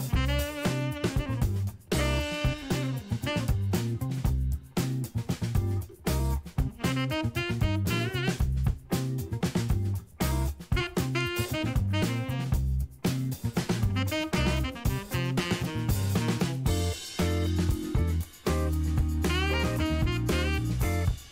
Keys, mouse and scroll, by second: 1.3-8.4 drag, 11.9 middle click, 13.0 KP_Decimal, 14.1-14.5 scroll down 4, 14.7 middle click, 15.2 scroll down 2, 15.6-16.7 ctrl+middle drag, 16.8 ctrl+middle click, 17.9 click, 19.5 shift+d, 20.0 shift+x.